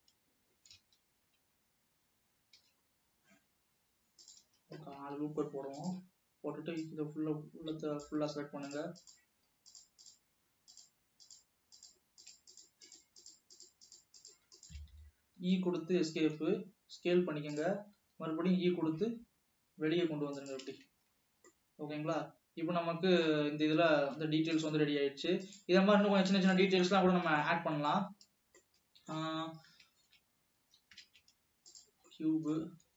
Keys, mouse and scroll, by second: 1.1 ctrl+z, 1.6 ctrl+z, 2.7 ctrl+r, 5.4 alt+a, 6.0 click, 7.0 click, 8.8 shift+click, 9.1 shift+click, 9.8 shift+click, 11.0 shift+click, 11.4 shift+click, 12.0 shift+click, 12.4 shift+click, 13.0 shift+click, 13.3 shift+click, 14.0 shift+click, 14.4 shift+click, 14.7 shift+click, 15.6 e, 16.6 s, 18.2 e, 20.8 alt+a, 21.1 Tab, 21.3 scroll down 2, 21.6-24.5 middle drag, 24.5 ctrl+s, 25.7 ctrl+s, 27.3 click, 27.5 Tab, 27.6-28.8 middle drag, 28.8 shift+scroll down 2, 29.0-30.0 middle drag, 30.0 shift+s, 30.8 Escape, 31.1 shift+a, 32.2-32.9 middle drag.